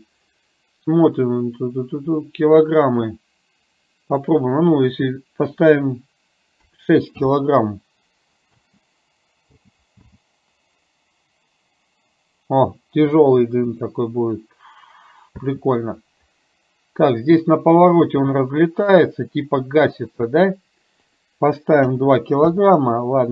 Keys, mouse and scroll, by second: 2.7-4.3 drag, 4.9-7.4 drag, 8.7 space, 9.6 space, 10.1 space, 15.4 space, 21.1-22.6 drag.